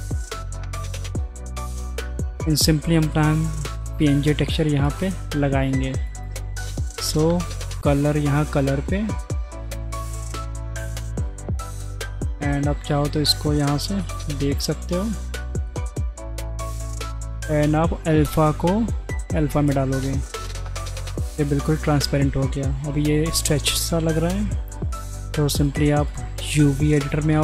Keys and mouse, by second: 1.7 middle click, 2.0 click, 4.6-5.0 drag, 6.1-7.1 drag, 12.9 z, 14.5 z, 15.5 middle click, 16.4 middle click, 18.3-19.2 drag, 20.8-21.2 middle drag, 21.7 shift+middle click, 24.1-24.5 middle drag, 25.7 click, 26.0-26.7 drag.